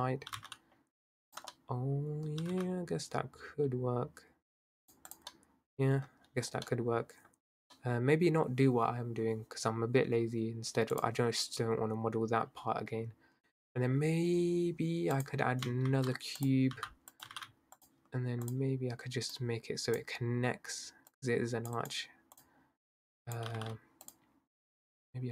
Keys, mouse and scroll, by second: 0.3 g, 1.5 middle click, 2.4 g, 5.1 click, 5.3-6.1 middle drag, 6.1-6.7 scroll down 1, 6.7-9.4 middle drag, 9.4-11.0 scroll up 2, 11.0 click, 13.4-14.0 middle drag, 15.2 click, 15.9 shift+a, 16.7 s, 17.2 g, 18.5 click, 21.1 click, 21.8 click, 22.4 click, 23.1 click, 23.5 g, 24.7 click.